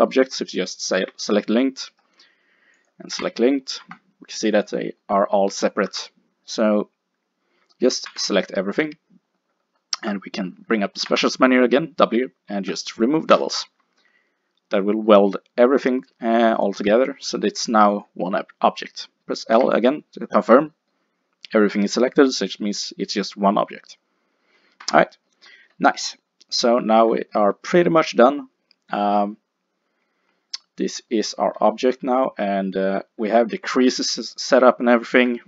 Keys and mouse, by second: 1.0 g, 2.8 click, 3.2 l, 3.9 g, 4.4 middle click, 5.9 a, 7.0-9.6 middle drag, 8.1 a, 11.1 w, 11.6-14.0 middle drag, 17.9 click, 19.6 l, 19.7-20.7 middle drag, 24.9 Tab, 29.3-31.1 middle drag, 33.3 Tab, 34.9 middle click, 35.3 Tab.